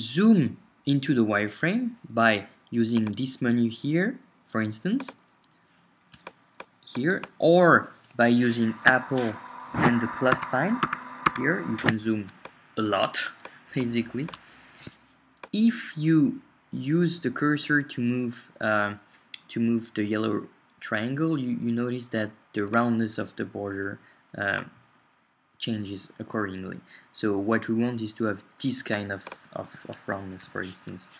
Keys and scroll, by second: 10.3 super+=.